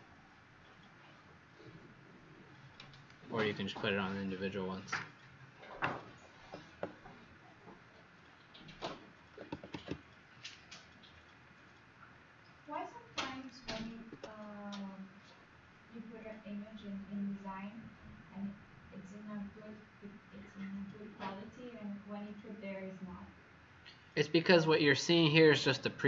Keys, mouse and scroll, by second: 11.1-11.7 scroll up 4, 12.0-13.3 scroll up 3, 13.9 ctrl+s.